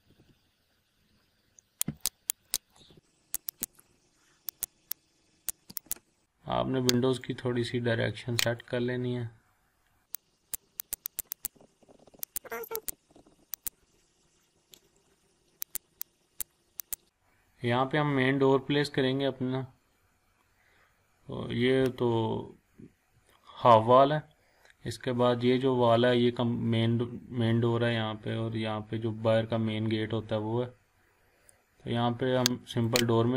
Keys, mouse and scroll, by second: 0.5 scroll down 1, 0.8 scroll up 1, 1.9 click, 2.8 Up, 2.9-3.4 click, 3.9 scroll down 1, 4.0 scroll up 1, 4.6-5.6 click, 6.2-6.5 scroll up 1, 7.2-8.8 drag, 8.9 scroll down 1, 9.5 scroll up 1, 10.1-10.6 click, 11.5 Up, 12.3 click, 12.4 scroll down 1, 12.5 scroll up 1, 12.8 click, 12.9 Up, 13.2 Down, 13.6 click, 13.7 scroll down 1, 13.8 scroll up 1, 13.9 scroll down 1, 14.1 scroll up 1, 14.2-14.5 scroll down 1, 14.7 scroll up 1, 14.8 scroll down 1, 15.3 scroll up 1, 15.7-16.5 click, 16.6 scroll down 1, 16.8 click, 17.0 scroll up 1, 17.1-17.6 scroll down 1, 20.5 scroll down 1, 20.8 scroll up 1, 32.7 click.